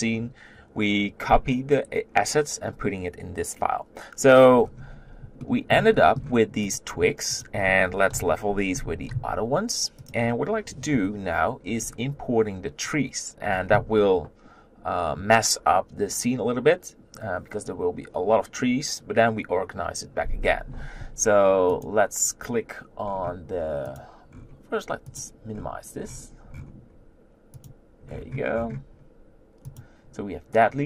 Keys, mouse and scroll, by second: 6.7 click, 7.4 shift+click, 8.1 KP_1, 8.8 g, 10.9 KP_7, 11.7-15.5 scroll down 2, 15.5-21.1 scroll down 1, 21.8 click.